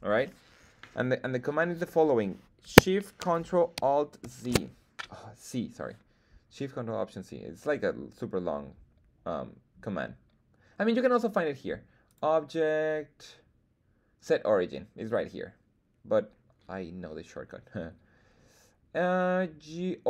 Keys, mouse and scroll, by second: 12.0-20.0 drag.